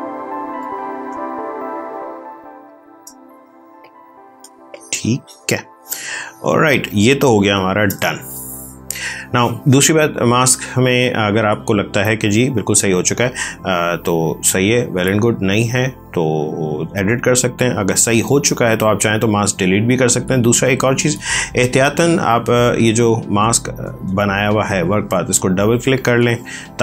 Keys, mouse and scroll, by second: 1.0 space, 1.5 ctrl+click, 3.7 click, 4.3 space, 4.6 click, 4.8 space, 6.1 ctrl+click, 14.0 click, 20.6 click, 23.5 click.